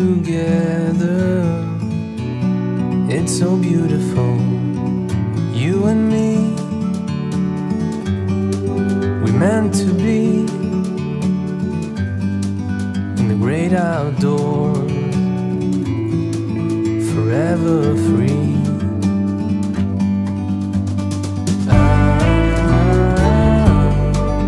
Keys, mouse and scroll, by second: 2.3 Up, 4.9 click, 5.3 shift+click, 6.0 click, 12.2 alt+scroll up 1, 13.0 scroll down 1, 13.7 space, 13.8 click, 13.9 space, 15.1 click.